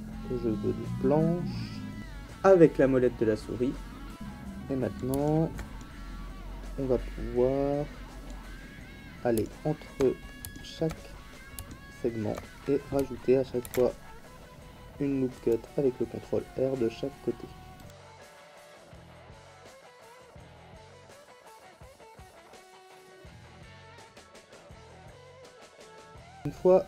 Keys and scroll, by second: 13.6 ctrl+r, 17.9 ctrl+r, 18.2 ctrl+r, 18.4 ctrl+r, 18.6 ctrl+r, 18.9 ctrl+r, 19.4 ctrl+r, 19.7 ctrl+r, 19.9 ctrl+r, 20.5 ctrl+r, 20.9 ctrl+r, 21.2 shift+space, 21.3 ctrl+r, 21.6 ctrl+r, 22.0 ctrl+r, 22.3 ctrl+r, 22.7 ctrl+r, 23.0 ctrl+r, 23.5 ctrl+r, 23.8 ctrl+r, 24.0 ctrl+r, 24.3 ctrl+r, 24.6 ctrl+r, 24.8 ctrl+r, 25.2 ctrl+r, 25.5 ctrl+r, 25.7 ctrl+r, 25.9 ctrl+r.